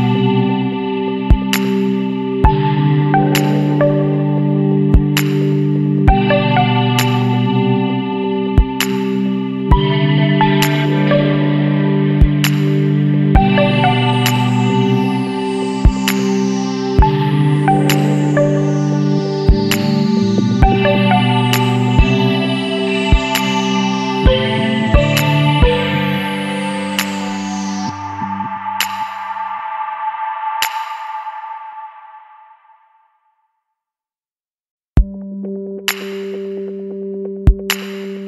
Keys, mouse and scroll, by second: 0.0 click, 0.8 scroll up 1, 2.2 click, 5.1 ctrl+click, 7.3 click, 9.2 click, 10.5 click, 12.0 ctrl+click, 13.8 click, 14.7 scroll down 1, 15.5 scroll down 1, 16.3 click, 18.0 click, 20.4 click, 21.3 click, 23.0 click, 24.9 click, 26.7 click, 27.6 click, 29.8 click, 31.6 click, 32.9 click, 35.2 ctrl+click, 36.4 click, 38.0 scroll down 1.